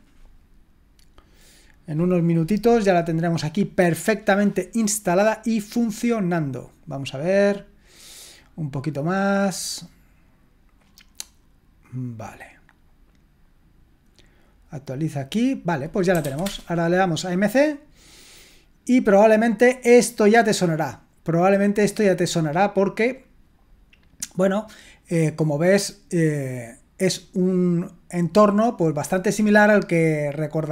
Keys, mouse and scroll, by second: 15.9-16.7 typing.